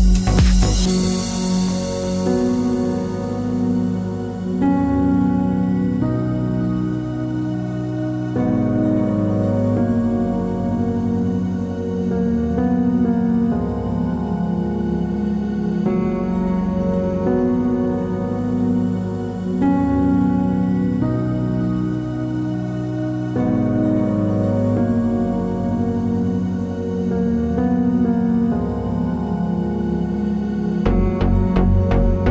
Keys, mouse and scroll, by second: 0.0 click, 0.0-1.8 middle drag, 0.5 KP_3, 1.8-3.8 drag, 2.2 s, 2.5 KP_Enter, 3.8-5.5 middle drag, 5.5 click, 5.7 middle click, 6.2 ctrl+click, 6.3-7.7 middle drag, 6.8 g, 7.8 click, 7.9 KP_3, 8.8-11.3 middle drag, 8.8 g, 11.3 click, 11.4-13.2 middle drag, 13.2 click, 13.6 ctrl+click, 13.9 KP_3, 14.6 g, 15.4 click, 15.4-17.0 middle drag, 17.0 click, 17.6 g, 18.9 click, 18.9-21.5 middle drag, 19.8 KP_3, 20.4 g, 21.5 click, 21.6-22.9 middle drag, 22.9 ctrl+click, 23.2 middle click, 23.8 ctrl+click, 24.3 s, 24.7 KP_Enter, 24.9 middle click, 25.2 click, 25.3 middle click, 25.4 scroll down 2, 25.6 Tab, 26.0 click, 26.1-30.0 middle drag, 27.4-28.1 scroll up 1, 29.6 KP_3, 30.0 click, 30.1-32.2 shift+middle drag, 30.3-30.9 scroll up 1, 30.9 g, 32.2 click.